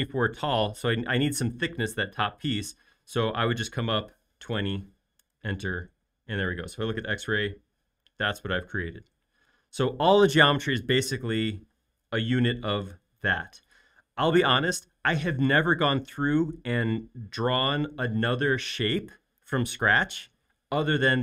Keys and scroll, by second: 1.0 typing, 4.4-5.2 typing, 5.2 Return, 7.0 x, 11.8 space.